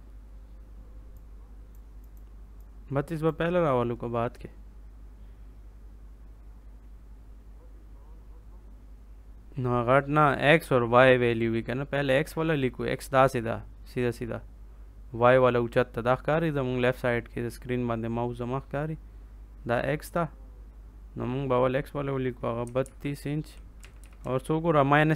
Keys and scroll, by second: 22.3-23.3 typing, 23.7 Right.